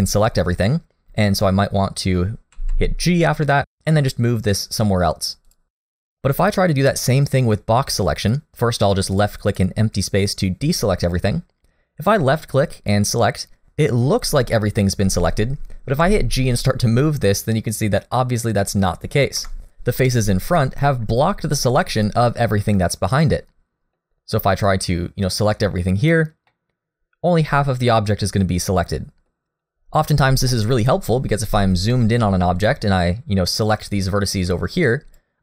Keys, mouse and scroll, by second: 0.3-1.3 scroll up 1, 2.5 g, 6.3 click, 9.5 click, 16.0 click, 16.0 g, 21.3 middle click, 24.1 click, 24.7 click, 26.5 middle click, 30.5 middle click, 31.2-31.8 scroll up 3, 31.9 shift+middle click, 32.3 scroll up 1, 32.6 click, 32.9-33.4 scroll up 1, 33.4 scroll down 1, 33.9 click.